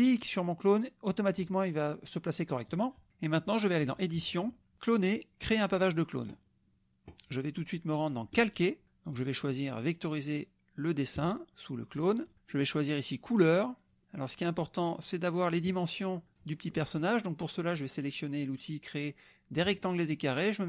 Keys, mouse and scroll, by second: 0.0-1.5 drag, 3.9 drag, 5.8 click, 8.3 click, 9.1 click, 11.1 click, 14.9 middle click, 19.6 click.